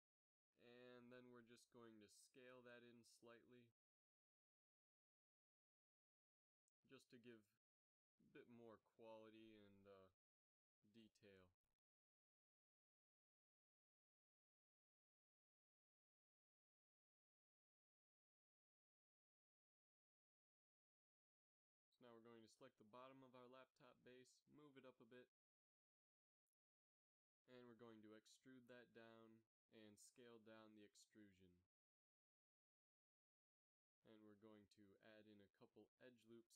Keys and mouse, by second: 1.6 ctrl+Tab, 2.7 b, 4.0 middle click, 4.8 s, 7.9 Tab, 8.4 z, 10.3 g, 12.9 a, 21.0 KP_3, 22.1 click, 22.4 Tab, 22.6 middle click, 23.0 a, 23.3 middle click, 23.3 z, 23.8 b, 25.7 g, 30.0 e, 31.9 middle click, 32.4 s.